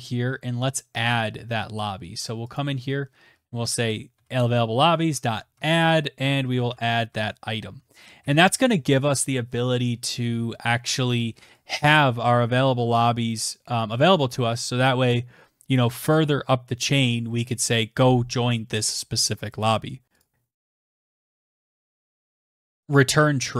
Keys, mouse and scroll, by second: 0.4 Return, 0.8 ctrl+v, 2.0-5.4 typing, 5.6 ctrl+s, 10.1 click, 10.4 Tab, 10.7 click, 17.4 click, 18.7-19.6 scroll, 19.6 scroll, 19.8 click, 20.2 ctrl+f, 20.2-23.5 typing.